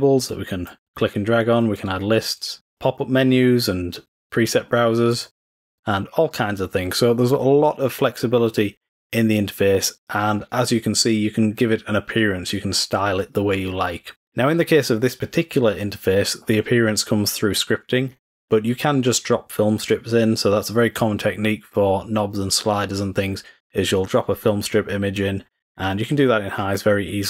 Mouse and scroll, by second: 0.5-1.3 drag, 1.3 click, 3.1-3.7 drag, 4.0 click, 7.1-8.1 drag.